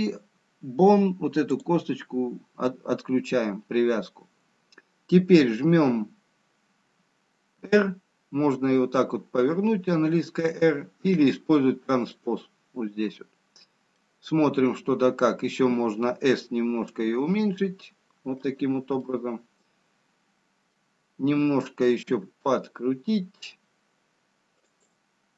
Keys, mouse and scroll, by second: 0.3-2.0 scroll down 1, 2.0 click, 8.0 r, 14.4 middle click, 17.1 s, 21.0 middle click, 22.4 r.